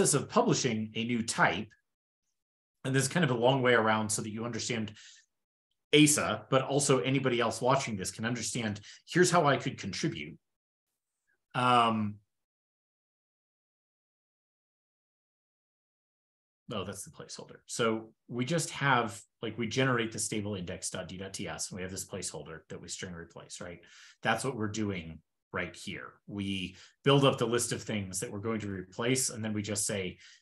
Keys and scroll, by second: 1.9 shift+super+[, 13.1 alt+super+], 17.5 alt+super+].